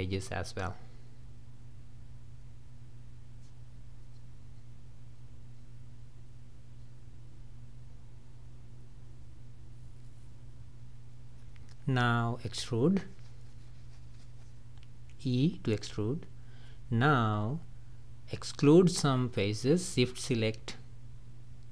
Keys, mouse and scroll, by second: 0.1 shift+click, 1.1 shift+click, 2.1 shift+click, 2.6 shift+drag, 2.8 scroll down 1, 2.9-3.6 middle drag, 3.6 shift+drag, 4.0 shift+click, 4.3 shift+click, 4.9 shift+click, 5.6 shift+click, 6.1 shift+click, 6.4 scroll up 2, 6.7 scroll down 1, 7.0 shift+middle drag, 7.2 scroll up 2, 7.4-8.0 scroll down 1, 8.2 shift+drag, 8.6 shift+click, 8.9 shift+click, 9.3 shift+click, 9.7 shift+drag, 10.0 shift+click, 10.2 shift+drag, 10.6 shift+click, 10.9 shift+click, 11.6-11.9 scroll down 3, 11.9 middle click, 12.7 scroll down 2, 12.9-14.2 middle drag, 14.2 e, 15.7-17.0 middle drag, 17.0-17.3 scroll up 2, 17.7-20.6 middle drag, 20.6 shift+click, 21.2 shift+click.